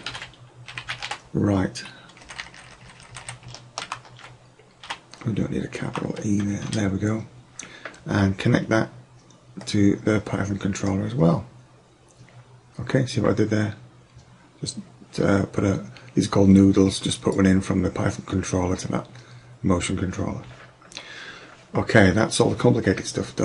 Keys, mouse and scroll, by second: 2.4 Left, 2.6 Left, 2.9 Left, 3.0 Left, 3.3 Left, 9.7-11.5 drag.